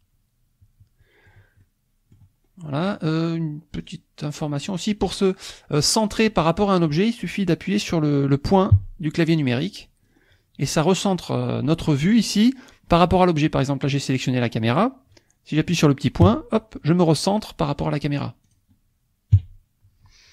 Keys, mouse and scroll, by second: 1.6 click, 2.5-3.1 scroll up 4, 3.8 scroll down 2, 4.4 scroll up 2, 5.1 click, 8.7 KP_Decimal, 9.7 scroll down 2, 10.8 click, 16.3 KP_Decimal, 18.5 click, 19.3 KP_Decimal.